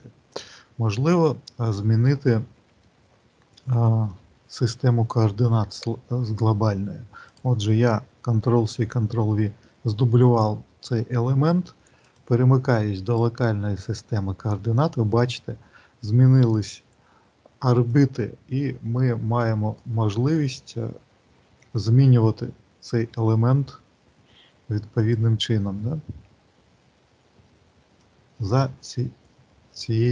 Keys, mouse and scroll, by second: 2.7 middle click, 7.2 click, 8.2 ctrl+c, 8.7 ctrl+v, 11.8 click, 17.7 click, 24.8 click.